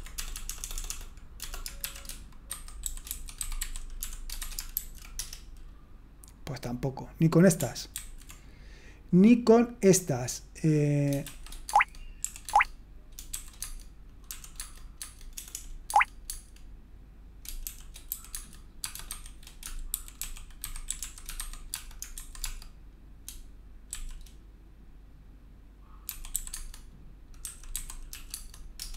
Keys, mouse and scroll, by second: 0.2 BackSpace, 0.3 BackSpace, 0.4 BackSpace, 0.6-1.8 BackSpace, 3.1-5.2 typing, 7.9 ctrl+c, 11.2 shift+w, 11.7 Tab, 12.2 r, 12.4 Tab, 13.3 typing, 14.3 typing, 15.3 typing, 17.7-21.4 typing, 22.4-23.9 typing, 26.0-28.1 typing, 26.5 Tab, 28.3 Tab, 28.8 Return.